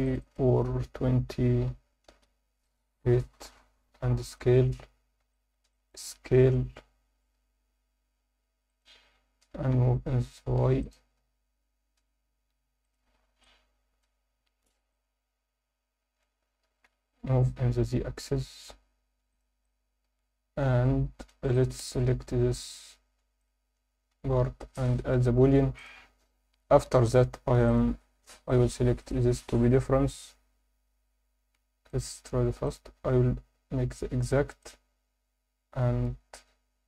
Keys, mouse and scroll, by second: 2.0 middle click, 2.6 click, 4.3-4.8 drag, 4.8-5.3 scroll up 2, 5.3 alt+shift+middle drag, 5.7 ctrl+alt+middle drag, 6.2 s, 8.7-9.7 drag, 9.7 y, 10.8 click, 11.2 s, 12.8 click, 13.1 scroll down 1, 13.4-14.0 alt+middle drag, 14.3 scroll up 2, 14.9-16.2 alt+middle drag, 16.8 g, 17.2 z, 19.6-21.3 alt+middle drag, 21.5 click, 23.4-23.8 drag, 24.2 ctrl+s, 24.8-25.8 drag, 27.6 click, 28.5 click, 31.9-34.8 drag.